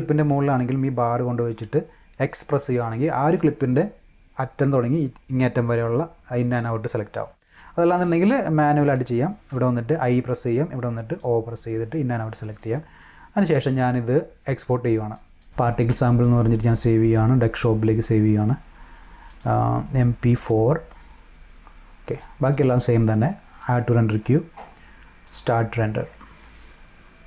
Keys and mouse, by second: 8.2-9.4 drag, 10.4-11.1 drag, 12.4 click, 15.1 drag, 19.2 click, 20.3 click, 22.1-22.4 drag, 23.5 click, 25.2 click.